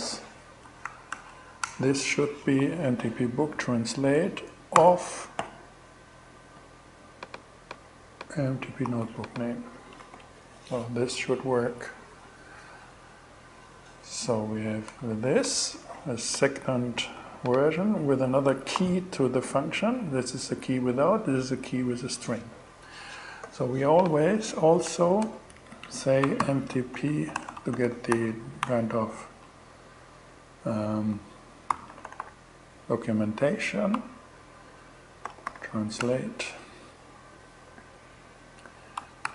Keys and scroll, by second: 0.3 shift+., 0.6 shift+0, 1.1 shift+Return, 1.8 Return, 2.0 super+v, 4.2 alt+g, 8.3 super+c, 15.3 shift+Return, 16.6 super+c, 17.8 super+Return, 18.1 super+Return, 18.2 super+v, 24.3 Return, 25.0 Up, 25.6-27.6 typing, 30.9-32.1 typing, 34.4-35.4 typing, 35.4 Return, 38.4-39.3 typing.